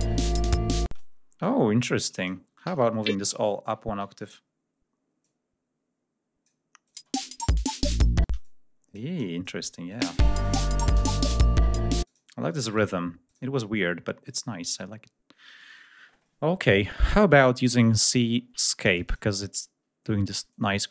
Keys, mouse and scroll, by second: 0.7 space, 0.7 click, 1.9 click, 2.1 e, 2.5 a, 3.6 alt+shift+Up, 5.0-6.4 drag, 6.6 click, 6.8 space, 8.0 space, 9.8 space, 11.8 click, 12.4 space, 12.5 click, 13.0 click, 14.1 right click, 18.8 click, 20.3 click.